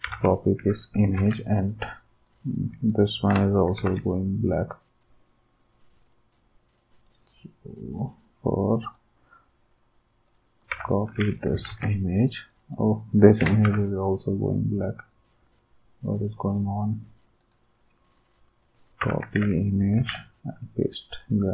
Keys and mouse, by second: 0.0 alt+Tab, 0.7 click, 1.2 ctrl+v, 2.2 click, 3.5 Delete, 3.8 alt+Tab, 7.1 click, 8.8 click, 10.3 click, 10.7 alt+Tab, 11.7 ctrl+v, 12.5-13.6 drag, 13.8 alt+Tab, 16.2-17.2 right drag, 17.4-18.4 drag, 18.6 right click, 19.0 alt+Tab, 20.0 ctrl+v.